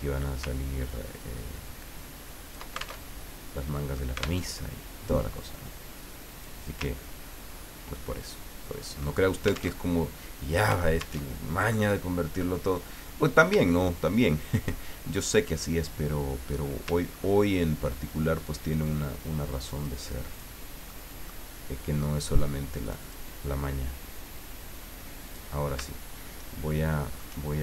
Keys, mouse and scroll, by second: 0.9-2.8 ctrl+drag, 3.1 ctrl+alt+Tab, 4.4 alt+Tab, 5.5 click, 7.0-9.0 ctrl+drag, 9.8 alt+Tab, 11.2 alt+Tab, 13.6 shift+click, 17.1-17.5 ctrl+scroll up 2, 19.7 click, 20.3 click, 20.9 middle click, 22.8 click, 25.2 click, 27.0 shift+middle click.